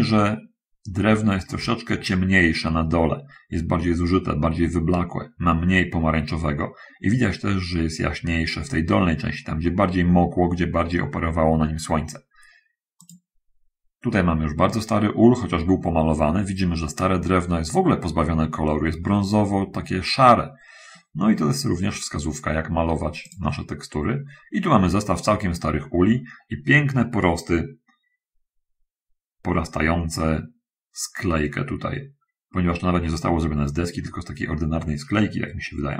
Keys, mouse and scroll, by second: 1.8-2.1 scroll up 2, 12.9 click.